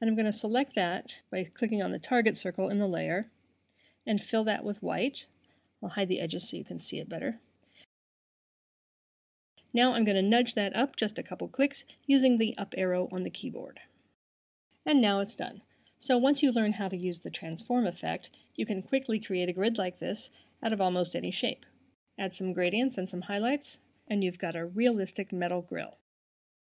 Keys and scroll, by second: 11.6 Up.